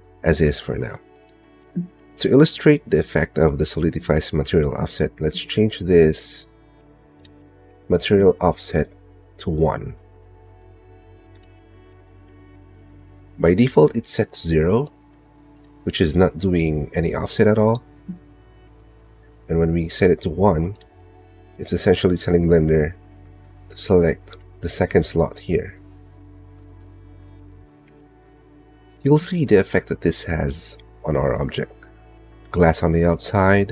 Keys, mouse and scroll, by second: 3.9 click, 5.0 click, 5.9 click, 12.7 click, 13.4 click, 15.2 click, 15.9-16.9 drag, 17.3 click, 17.9 click, 18.8 middle click, 32.4 middle click.